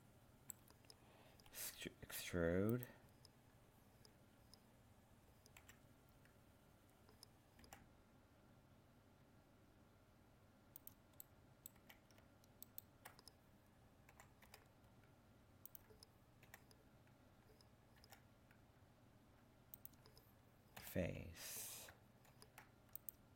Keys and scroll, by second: 22.3 ctrl+f.